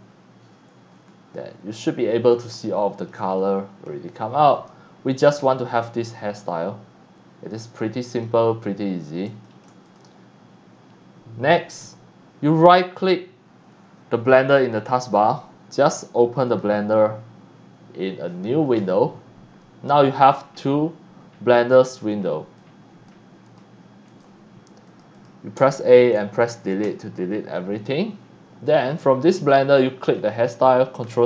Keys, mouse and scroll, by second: 1.1-1.6 scroll down 2, 2.7-3.1 shift+middle drag, 3.4-3.8 middle drag, 4.5 click, 5.2 click, 6.5-8.2 middle drag, 8.5 scroll up 1, 8.9 scroll down 2, 9.4 middle drag, 9.8 click, 14.9 right click, 16.5 click, 21.7 click, 22.6-23.1 drag, 23.4 click, 24.1 click, 24.8 click, 25.1 click, 25.6 Caps_Lock, 26.9 Delete, 27.8 right click, 28.8 click, 29.4 click, 30.0 click.